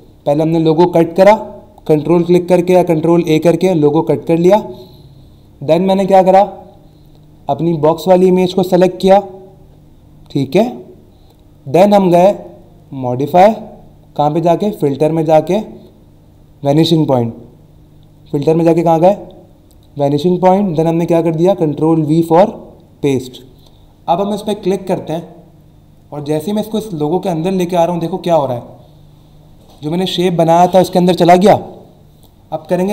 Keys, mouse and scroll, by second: 25.1 click.